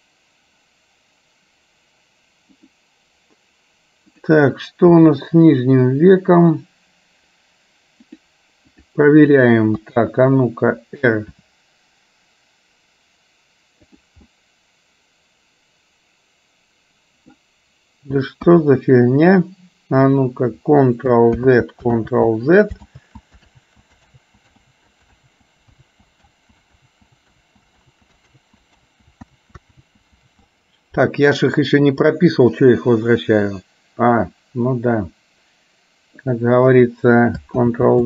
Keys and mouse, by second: 4.2 click, 5.2 g, 9.9 KP_3, 11.5 r, 14.4-17.4 middle drag, 18.6 KP_1, 21.6 ctrl+z, 22.1 ctrl+z, 23.0 ctrl+z, 23.6 ctrl+z, 24.2 ctrl+z, 24.9 ctrl+z, 25.4 ctrl+z, 25.9 ctrl+z, 26.5 ctrl+z, 27.0 ctrl+z, 27.5 ctrl+z, 28.0 ctrl+z, 28.5 ctrl+z, 29.0 ctrl+z, 29.5 ctrl+z, 30.0 ctrl+z, 30.4 ctrl+z, 33.0-36.5 drag, 37.7 ctrl+z.